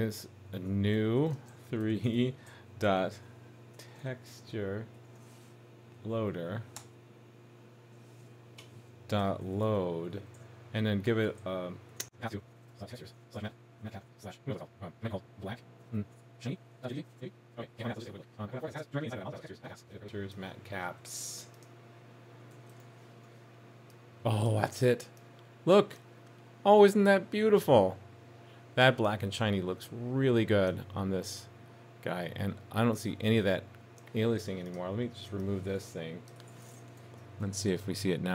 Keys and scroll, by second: 17.1 super+s, 22.8 super+s, 37.0 super+s.